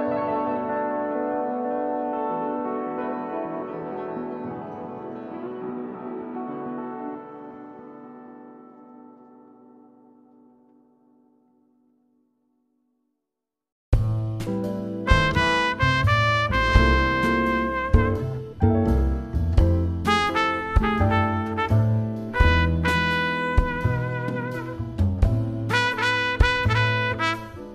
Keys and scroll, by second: 0.1 BackSpace, 3.9 shift+Left, 6.0 shift+Right, 14.7 shift+c, 15.8 BackSpace, 17.6 =, 20.4 shift+c, 24.0 BackSpace, 27.2 shift+Left.